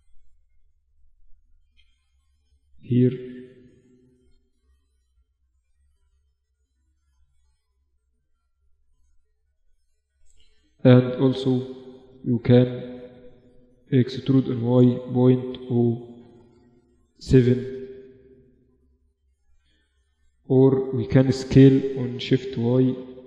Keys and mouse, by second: 0.3-1.3 drag, 1.3 z, 3.2 z, 4.6 z, 5.9 middle click, 8.1-12.1 right drag, 12.3-17.2 middle drag, 14.0 e, 19.1 ctrl+z, 21.2 s.